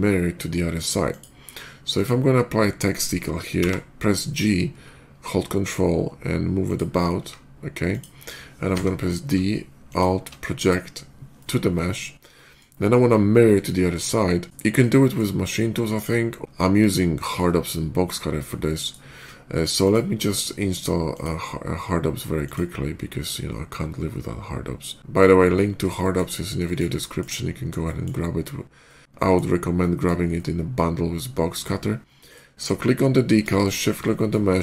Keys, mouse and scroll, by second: 0.9 click, 1.8 click, 6.5 ctrl+click, 7.0 s, 7.7 click, 8.5 d, 9.7 alt+click, 10.4 alt+click, 11.2-11.7 alt+middle drag, 12.2 alt+middle drag, 14.8 middle click, 15.4-16.3 middle drag, 17.0 shift+middle click, 17.5-18.7 shift+middle drag, 19.7 shift+click, 21.0 click, 22.3 click, 23.2 middle click, 25.8 shift+middle click, 26.5 shift+middle click, 26.8 shift+middle drag, 27.7 shift+middle click, 28.7-29.2 shift+middle drag, 29.6 shift+middle click, 30.2-31.5 shift+middle drag, 32.1 shift+click, 33.4 shift+click, 34.0 shift+middle click, 34.4 alt+x.